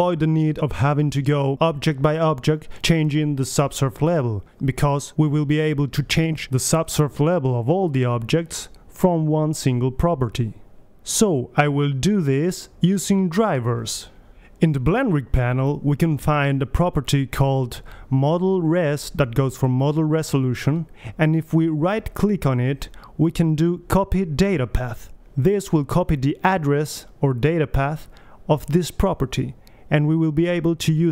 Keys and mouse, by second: 0.7-1.8 right drag, 1.8-2.9 drag, 3.1-3.5 middle drag, 3.5-4.8 right drag, 4.6-5.7 drag, 5.4 right click, 5.7-6.9 middle drag, 6.9-8.1 right drag, 13.7-14.8 right drag, 15.4-16.9 drag, 17.2 click, 21.9-23.7 right drag, 31.0-31.1 middle drag.